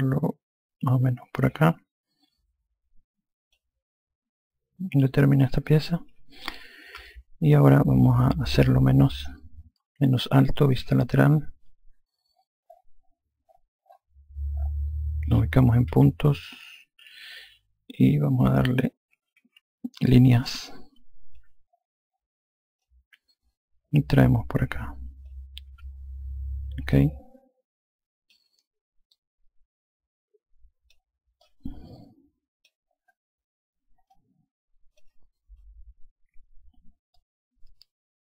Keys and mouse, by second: 0.0 click, 7.0 F1, 8.6 alt+click, 11.7 F3, 17.2 5, 19.1-19.9 typing, 20.5 click, 22.9 click, 25.8 F1, 27.0 alt+click, 29.2 click, 31.5 click, 34.2 alt+click, 37.4 alt+click.